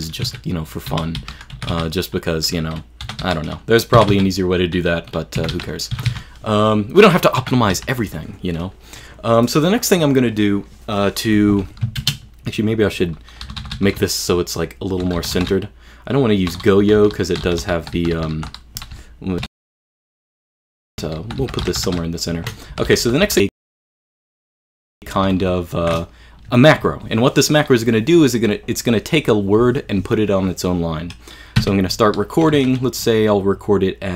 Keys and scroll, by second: 0.3-1.8 typing, 2.8-4.1 typing, 5.2-8.3 typing, 12.0 shift+super+space, 13.5 super+l, 13.6 super+l, 13.8 super+l, 14.0 super+o, 14.7 super+o, 15.2 super+l, 15.4 super+l, 16.2 super+i, 16.6 super+i, 16.9 super+k, 17.0 super+k, 17.2 super+k, 17.5 super+k, 17.6 super+k, 17.8 super+h, 18.0 super+h, 18.2 super+h, 18.2 super+l, 18.4 super+h, 19.0 super+o, 19.6 super+o, 20.6 super+i, 20.9 super+i, 21.1 super+i, 21.2 super+h, 21.5 super+k, 21.7 super+h, 21.7 super+k, 21.7 super+h, 21.8 super+k, 21.9 super+h, 22.0 super+k, 22.5-24.1 typing, 25.2 super+l, 25.3 super+l, 25.5 super+l, 31.6 q.